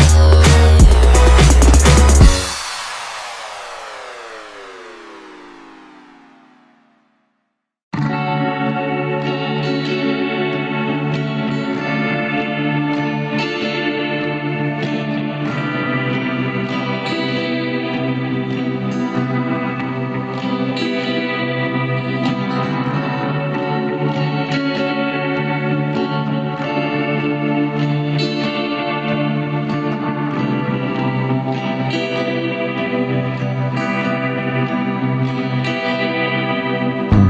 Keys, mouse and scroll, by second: 0.3 click, 0.9 b, 2.4 click, 6.0 click, 7.7 click, 8.4 click, 9.4 click, 10.3 shift+click, 11.0 shift+click, 11.4 shift+click, 12.3 KP_1, 13.1-13.9 scroll up 3, 14.7-16.5 drag, 16.5 ctrl+b, 22.1 Tab, 22.5 scroll down 1, 23.3 click, 24.7 click, 25.9 click, 28.2 click, 30.2 click, 31.9 click, 32.7-34.7 drag, 36.2 click, 37.0 click.